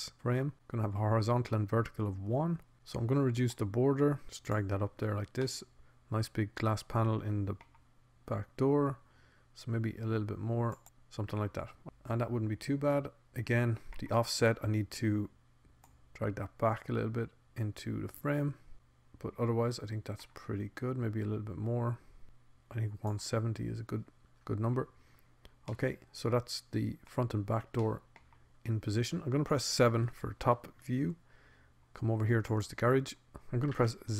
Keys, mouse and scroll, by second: 5.9-7.1 middle drag, 7.7 middle click, 7.9 middle click, 8.5 middle click, 12.0 middle click, 13.4 middle click, 14.3 middle click, 17.5-18.7 drag, 18.7-19.5 scroll up 1, 19.5 middle click, 20.1 middle click, 20.5-23.9 middle drag, 27.3 middle click, 28.3 middle click, 30.7 middle click, 31.4 middle click, 31.7 KP_7, 33.5 Tab.